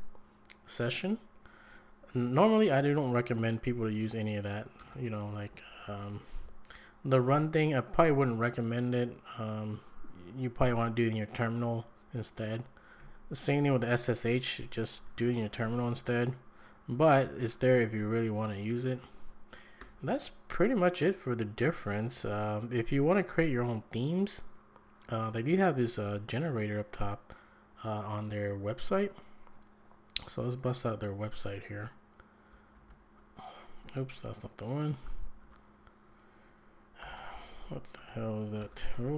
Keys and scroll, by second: 4.8 ctrl+space, 5.5 shift+Right, 5.9 shift+Right, 13.0 shift+Right, 19.8 Escape, 32.7 ctrl+s, 33.8 Escape, 35.4 ctrl+f, 36.8-39.1 typing, 38.0 Tab.